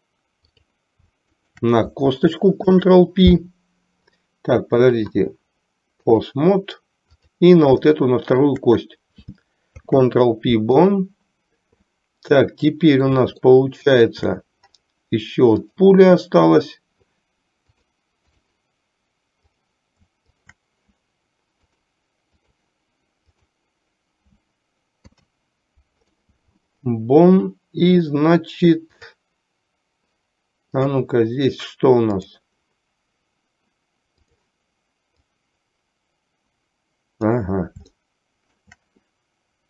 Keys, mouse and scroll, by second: 4.3 ctrl+p, 4.9-6.6 drag, 8.1 shift+middle click, 12.1-13.3 middle drag, 13.6 shift+middle click, 15.7 click, 17.8-18.6 drag, 19.6 click, 20.4 shift+click, 21.7-22.7 drag, 23.6 click, 25.1 ctrl+p, 29.1 click, 30.8 click, 32.3 click, 34.4 click, 35.2 click, 35.6-37.6 drag, 38.1-38.8 shift+middle drag.